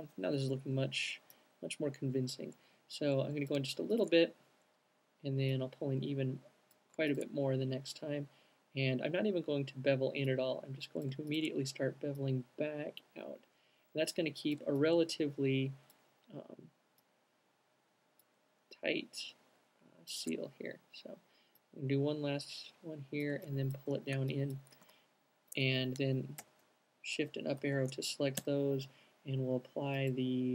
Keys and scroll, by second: 25.2 alt+q, 26.0 alt+shift+q, 27.3 alt+shift+fn+Up, 28.0 alt+shift+fn+Up, 28.7 m.